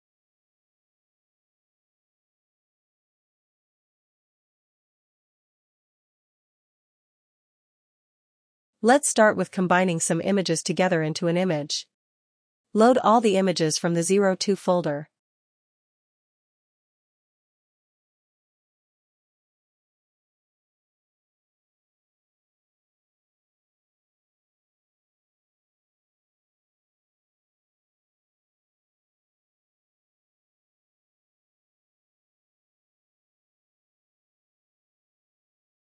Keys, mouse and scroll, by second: 0.8 click, 4.9 click, 10.1 click, 12.7 click, 19.8 click, 19.9 click, 24.4 click, 25.9 click, 28.7-35.8 drag.